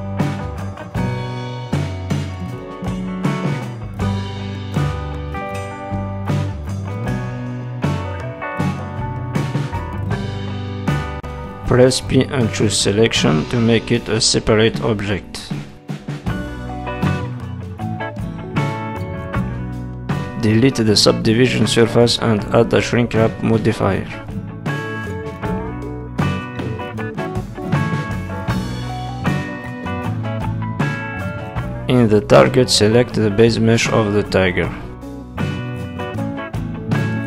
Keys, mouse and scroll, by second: 0.8 middle click, 1.4-2.0 scroll up 3, 2.0 click, 3.8 middle click, 4.6 s, 6.9-7.3 scroll up 2, 7.3 middle click, 8.5 scroll up 2, 8.8 middle click, 11.6 middle click, 13.0 p, 14.4 Tab, 15.2 click, 16.1-16.6 scroll down 3, 16.3 middle click, 18.5-18.8 scroll up 2, 18.8 Tab, 19.3 Tab, 19.7 middle click, 20.8 click, 22.8 click, 23.5 click, 33.1 click, 35.0 middle click, 36.6 z.